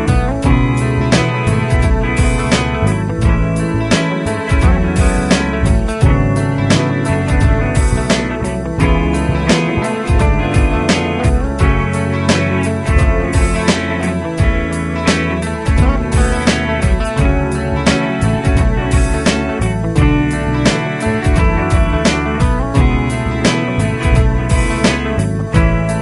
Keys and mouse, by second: 0.7 shift+\, 14.2 F3, 15.6 F2.